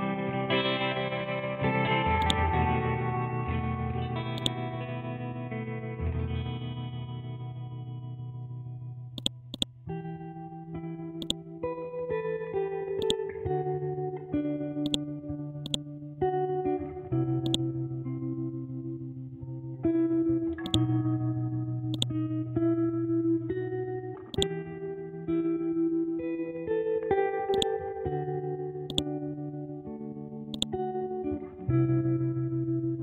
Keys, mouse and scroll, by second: 0.9-2.2 scroll up 1, 2.2 click, 3.2 ctrl+z, 4.3-6.2 drag, 6.2-6.5 scroll down 1, 9.2 click, 9.9-10.6 scroll down 1, 11.2 click, 11.9-13.0 scroll up 1, 13.0-27.5 drag, 27.5-30.5 drag.